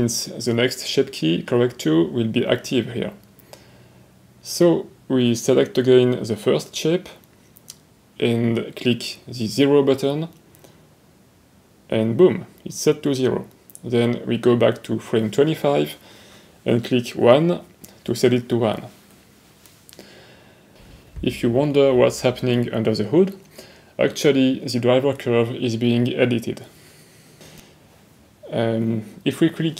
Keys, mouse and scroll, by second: 10.9 middle click, 12.7 right click, 19.1 click, 23.8-25.3 middle drag.